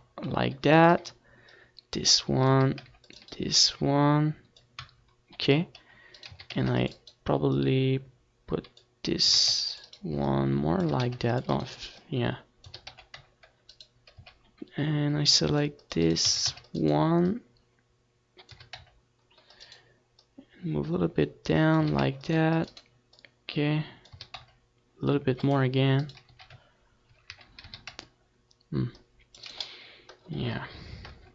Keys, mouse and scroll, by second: 0.7 a, 1.2 c, 1.8-3.5 right drag, 2.3-3.5 drag, 3.4 a, 3.7 c, 3.9 click, 4.1-5.6 right drag, 4.3-5.6 drag, 6.5 c, 7.0 right click, 7.1 a, 7.3 c, 10.1 a, 10.3 c, 10.8 right click, 11.0-14.1 middle drag, 11.5 a, 11.7 c, 13.3 a, 13.6 c, 14.1 click, 14.5-16.3 right drag, 14.8 c, 16.7-17.8 right drag, 16.8 a, 17.0 c, 19.0 a, 19.2 click, 19.2 c, 20.2 right click, 21.9 click, 22.1 a, 22.5 c, 23.2-25.0 right drag, 23.5-25.3 drag, 24.5 a, 24.8 c, 26.4 right click, 26.6 z, 27.6 z, 27.9 a, 28.2 c, 29.5-31.3 middle drag, 30.9 KP_1.